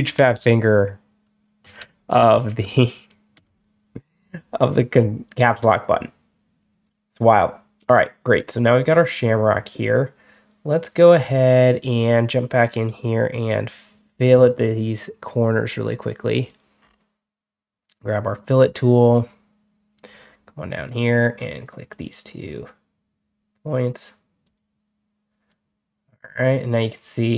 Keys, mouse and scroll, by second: 0.0-3.0 typing, 3.2 Return, 5.0 click, 12.6 right click, 13.9 click, 16.2 click, 16.7 middle click, 20.6 click, 21.8 click, 24.3 click, 25.3-27.3 drag.